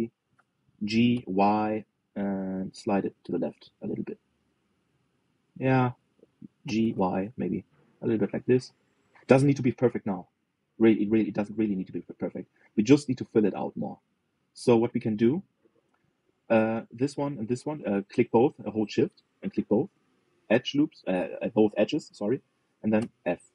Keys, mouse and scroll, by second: 4.8-7.3 middle drag, 7.3 g, 10.1 middle click, 10.6-11.0 scroll down 2, 11.0-12.0 middle drag, 12.0-12.3 scroll up 2, 12.3 shift+middle click, 13.0 click, 14.8 click, 15.3-18.0 middle drag, 18.0 shift+click, 18.5-21.3 middle drag, 21.3-22.5 scroll up 2.